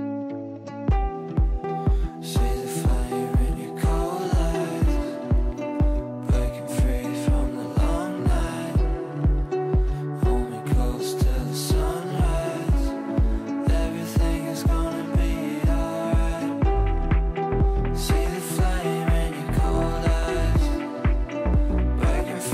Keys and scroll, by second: 0.0 ctrl+z, 1.1 ctrl+z, 7.6 g.